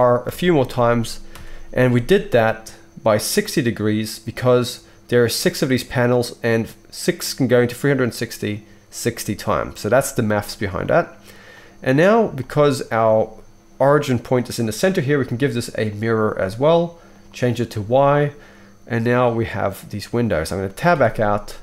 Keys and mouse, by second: 0.2 shift+r, 0.7 shift+r, 1.3 shift+r, 11.9-17.2 middle drag, 12.0 click, 12.0 right click, 17.2 right click, 17.5 middle click, 17.7-18.9 right drag, 18.9-21.6 middle drag, 20.9 Tab.